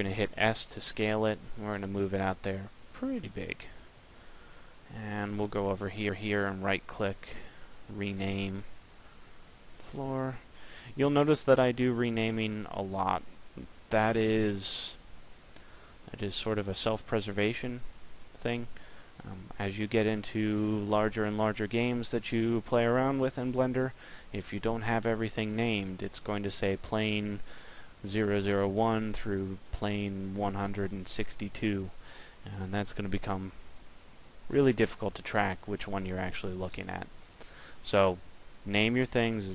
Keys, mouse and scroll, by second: 0.5 s, 3.2 click.